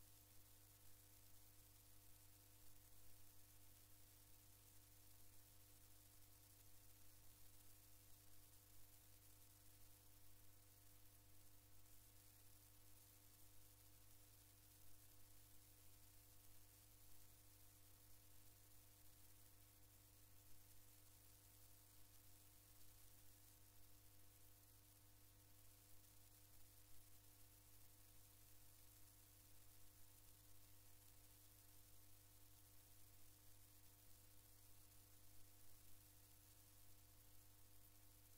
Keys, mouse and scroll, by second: 0.0-4.4 drag, 4.8 click, 6.2-6.6 scroll up 1, 7.8 click, 9.9 click, 13.1-17.4 drag, 18.9 click, 23.5 click, 23.8-25.1 middle drag, 26.8-28.1 drag, 29.6-31.6 drag, 34.3 click, 36.7 click.